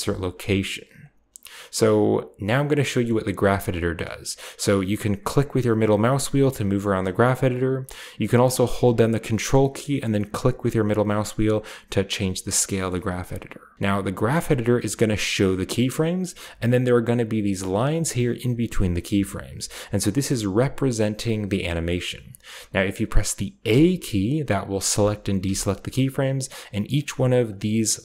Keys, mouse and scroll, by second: 0.2 click, 1.4-2.4 drag, 2.9-4.9 middle drag, 6.7-8.6 middle drag, 10.2-12.7 ctrl+middle drag, 23.5 a, 24.8 a, 25.3 a, 26.8 click, 27.3-28.0 drag, 27.3 typing.